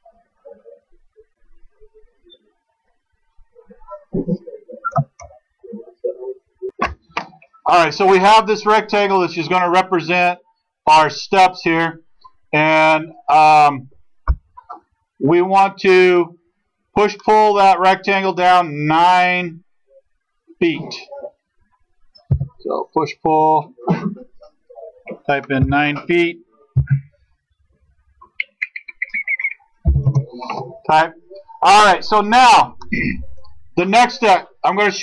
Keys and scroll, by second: 22.3 p, 25.7 9, 26.7 ', 29.9 ', 30.1 Return.